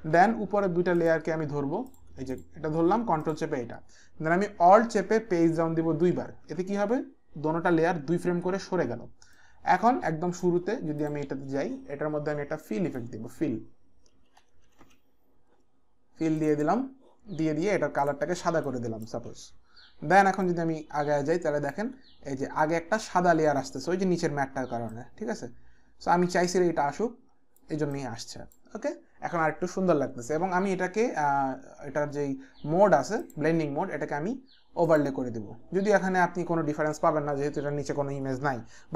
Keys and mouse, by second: 1.7 click, 3.2 ctrl+click, 5.7 alt+Page_Down, 6.2 alt+Page_Down, 9.3 click, 11.0 click, 12.6 click, 13.9-15.3 typing, 16.4 click, 16.7-17.4 typing, 18.0 click, 18.9 click, 18.9 l, 19.3 Return, 20.4 Return, 20.4 click, 24.9 click, 28.0 click, 33.2 click, 34.8 click.